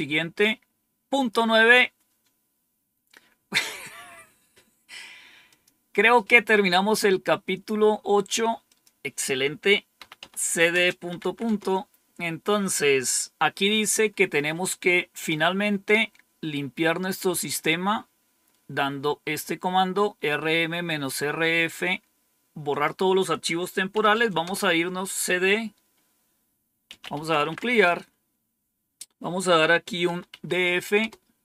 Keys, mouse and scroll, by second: 5.4 click, 8.6 click, 9.7-11.2 typing, 11.4 Return, 22.6 click, 23.6-24.6 typing, 26.7-27.9 typing, 29.7-30.4 typing, 30.9 Return.